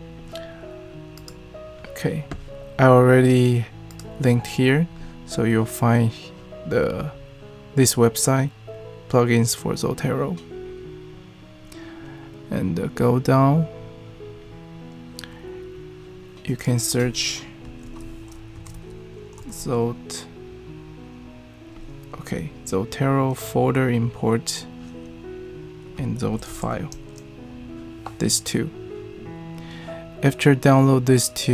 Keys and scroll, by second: 17.8 super+f, 18.3-19.3 typing, 26.0-27.1 typing.